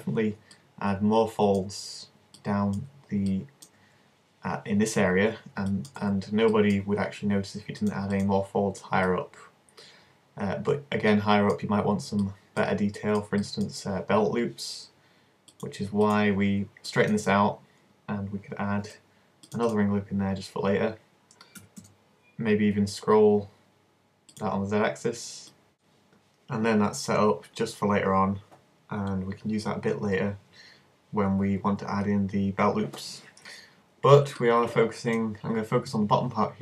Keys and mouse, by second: 6.1 z, 6.8 z, 8.3-10.4 drag, 10.4 middle click, 10.8-13.5 drag, 15.2 click, 16.2-17.3 drag, 18.8 ctrl+r, 21.6 s, 24.4-25.7 drag, 25.8-27.5 drag, 27.5-36.6 middle drag.